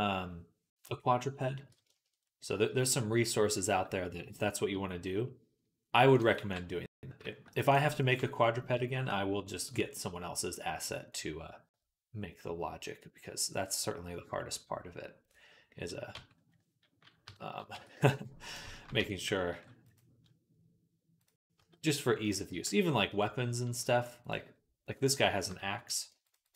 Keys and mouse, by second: 6.0 click, 6.2 b, 7.2 middle click, 7.6-18.4 drag, 7.8 b, 16.0 Tab, 17.1 KP_3, 17.6 Tab, 18.4-21.1 shift+middle drag, 18.8 Tab, 19.3 ctrl+r, 21.1-22.1 drag, 21.4 z, 22.1-24.1 middle drag, 22.3 g, 24.1 click, 25.0-26.1 middle drag, 26.1 alt+shift+click, 26.1 alt+shift+middle click, 26.3 alt+shift+click, 26.3-26.5 alt+shift+middle drag.